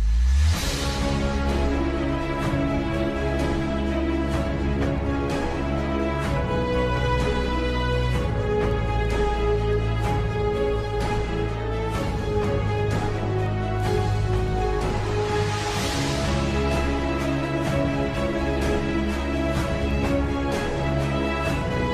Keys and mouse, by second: 1.9 g, 5.9 z, 8.2 middle click, 10.0-11.7 middle drag, 13.1 Tab, 13.3-15.3 middle drag, 16.6 middle click, 21.1 Tab.